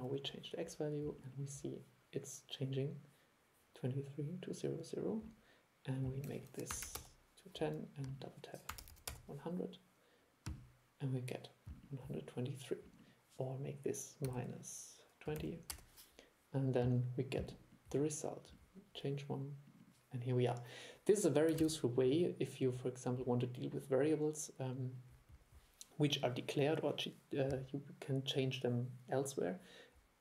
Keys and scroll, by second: 21.7 super+e.